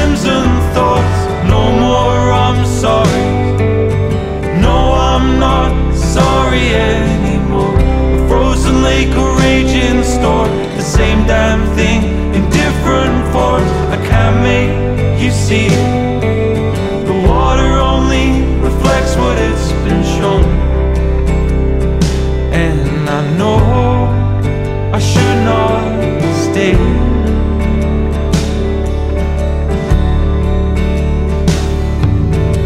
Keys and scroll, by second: 0.0 super+=, 0.6 super+z, 1.2 super+z, 4.1 super+-, 4.6 super+=, 4.9 super+z, 7.7 super+z, 7.8 super+-, 8.2 super+=, 11.3 super+z, 11.6 super+=, 13.3 super+-, 13.5 super+-, 14.3 super+=, 14.5 super+z, 16.0 shift+super+z, 17.2 super+z, 18.2 super+-, 18.7 super+-, 19.0 super+-, 19.4 super+=, 21.1 super+-, 21.8 super+=, 25.7 super+-, 25.9 super+-, 26.0 super+-, 26.1 super+=, 26.3 super+=, 27.1 super+-, 27.4 super+=, 27.8 super+-, 27.9 super+=.